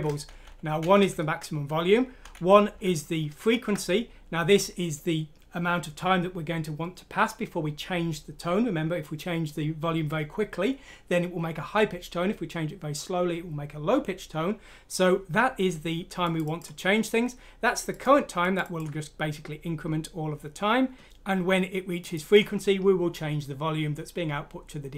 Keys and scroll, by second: 0.2 typing, 2.2 typing.